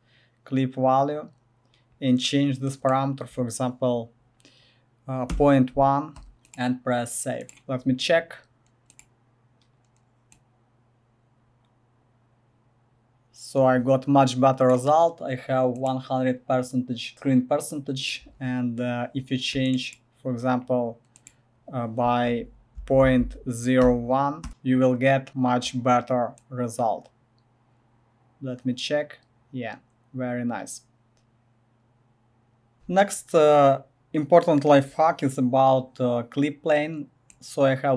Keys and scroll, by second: 5.3 1, 6.1 Return, 22.8 Right, 23.0 Left, 23.8 0, 24.4 Return.